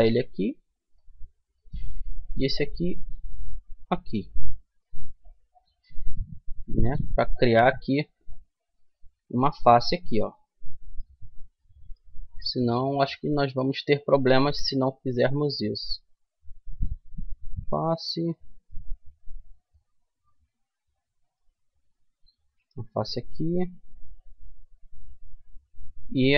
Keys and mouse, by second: 1.2-2.9 right drag, 2.2-4.0 drag, 5.0 middle click, 6.9 middle click, 8.4-10.0 right drag, 9.5 f, 10.2 middle click, 12.9-14.0 right drag, 14.3 ctrl+z, 16.5 right click, 16.5 f, 20.9-23.3 right drag, 22.4 f, 24.6 a, 26.1-26.3 right drag.